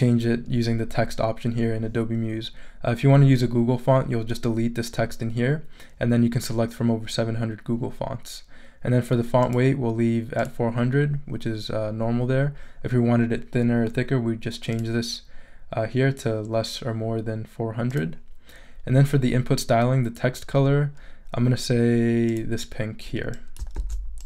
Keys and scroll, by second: 23.7 super+c.